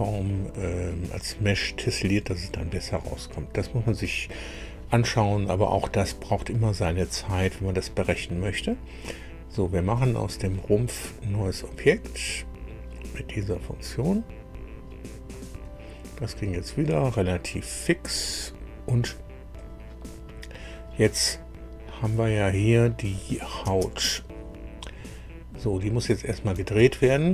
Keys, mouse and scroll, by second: 9.9 click, 11.7 click, 18.3-18.7 scroll down 1, 19.5 click, 23.1 click, 23.6 space, 24.4-24.7 scroll down 2, 25.5 scroll down 2, 26.9 shift+middle click, 26.9-27.3 shift+drag.